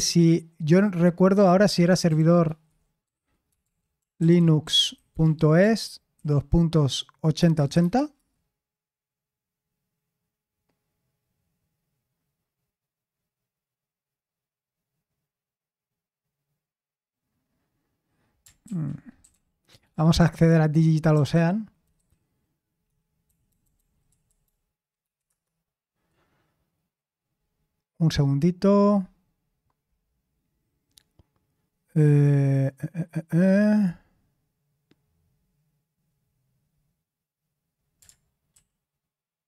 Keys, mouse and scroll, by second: 1.9-6.1 typing, 7.4-7.8 typing, 8.1 Return, 18.6 ctrl+t, 18.9-21.8 typing, 21.9 Down, 23.2 Down, 23.5 Down, 23.6 Down, 25.2 Return, 38.5 super+l.